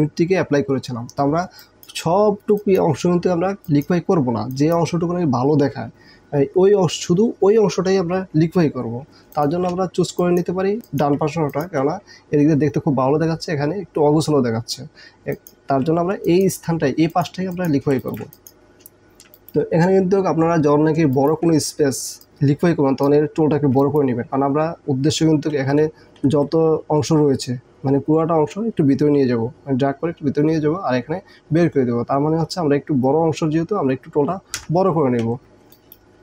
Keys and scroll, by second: 1.7 space, 2.6 space, 3.6 space, 9.2 ctrl+space, 10.1 space, 10.9 space, 14.5 space, 15.1 ctrl+space, 16.2 ctrl+space, 18.0 ctrl+alt+space, 19.3 ctrl+alt+space, 25.6 KP_2, 26.3 KP_1, 34.7 KP_2.